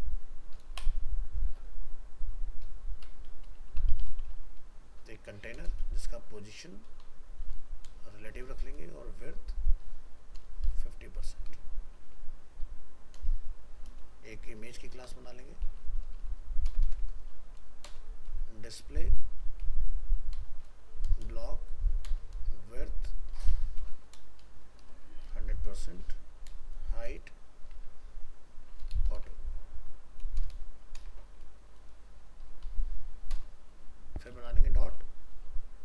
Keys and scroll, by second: 29.2 ctrl+shift+Left, 31.0 ctrl+BackSpace.